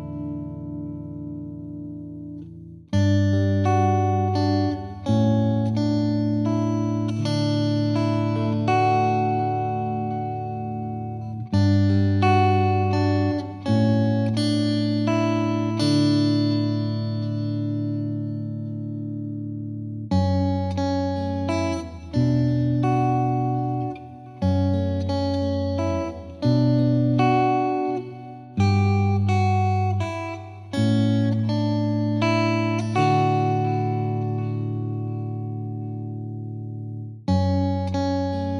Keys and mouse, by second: 0.6 click, 1.1 click, 2.2 click, 2.8 click, 3.2 click, 3.6 click, 4.7 click, 7.2 click, 7.9 click, 8.4 click, 8.8 click, 9.3 click, 9.7 click, 10.0 click, 10.1 click, 11.2 click, 11.5 click, 12.1 click, 12.7 click, 12.8 click, 13.7 click, 15.5 click, 15.9 click, 17.6 click, 17.9 click, 18.1 click, 19.0 click, 20.3 click, 21.6 click, 22.4 click, 23.1 click, 23.7 click, 24.4 click, 25.6 click, 26.0 click, 27.1 click, 27.7 click, 27.7 click, 28.6 click, 28.9 click, 29.2 click, 29.5 click, 30.3 click, 30.5 click, 31.0 click, 31.7 click, 32.3 click, 35.2 click, 35.6 click, 36.8 click.